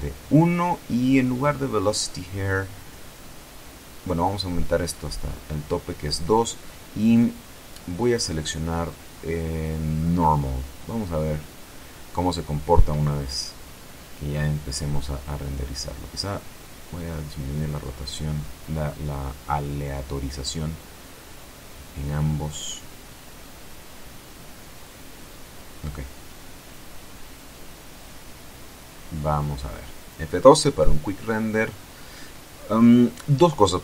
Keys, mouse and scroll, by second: 2.8-5.5 drag, 7.4 click, 13.2 click, 16.1-20.3 drag, 20.7-23.4 drag, 24.0-24.9 scroll down 1, 25.2 shift+middle click, 26.2 KP_0, 27.4 scroll up 1, 29.7 F12.